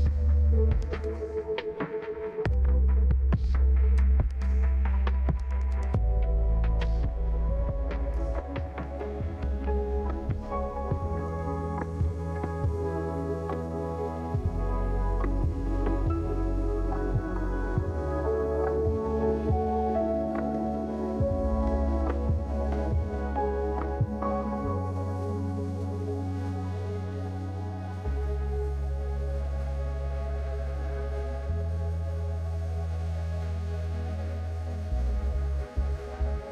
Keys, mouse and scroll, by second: 0.3 right click, 0.9 middle click, 2.3 right click, 3.1 click, 5.2 click, 6.3-6.6 scroll down 2, 6.6 scroll up 2, 6.7-8.2 scroll down 3, 7.0 middle click, 7.5-10.2 right drag, 12.1 middle click, 12.5 right click, 19.2 middle click, 22.6 ctrl+s, 35.3 ctrl+s.